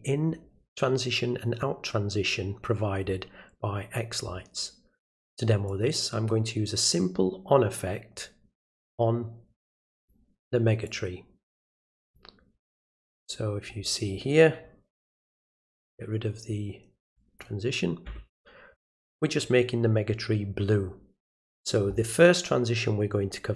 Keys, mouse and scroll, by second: 5.7-10.1 drag, 10.8-12.1 drag, 12.8 click, 17.1 click.